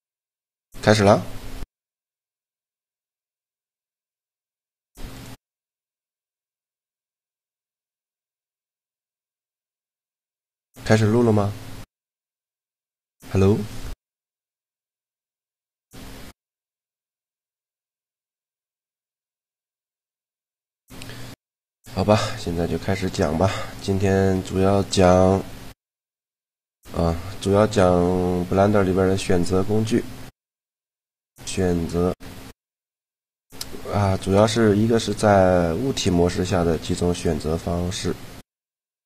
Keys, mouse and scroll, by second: 2.2-7.4 middle drag, 4.6-6.6 drag, 9.1-13.6 middle drag, 22.0-24.2 middle drag, 27.1-35.8 middle drag, 35.9 middle click.